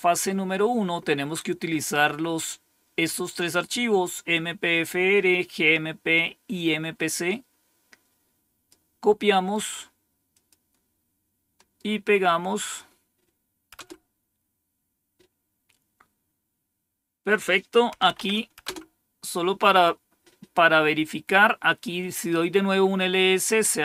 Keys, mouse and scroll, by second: 7.2-8.6 drag, 9.2 right click, 10.2 click, 11.4 right click, 12.5 click, 13.6 Return, 17.6-18.5 typing, 23.3 click.